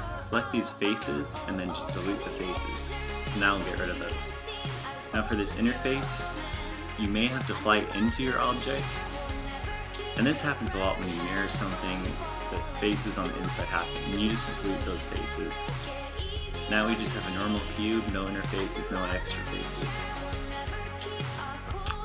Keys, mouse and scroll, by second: 0.8 right click, 2.6 x, 4.4 z, 5.8 z, 7.9 shift+f, 13.1 x, 18.7 Tab, 20.8 a.